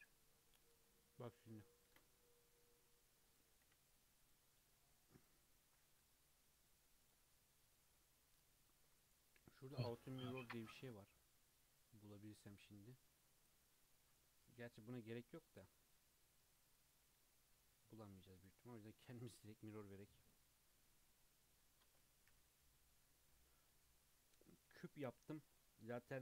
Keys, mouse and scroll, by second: 0.4-0.8 scroll down 1, 0.8-1.9 middle drag, 1.9 ctrl+r, 3.6 1, 4.0 click, 4.6 x, 6.0 Tab, 7.0 click, 8.6-9.6 drag, 10.6 click, 13.4 click, 15.4 click, 16.7 click, 18.1 click, 18.4-20.8 drag, 20.8-22.3 middle drag, 22.3 n, 22.7-26.2 middle drag.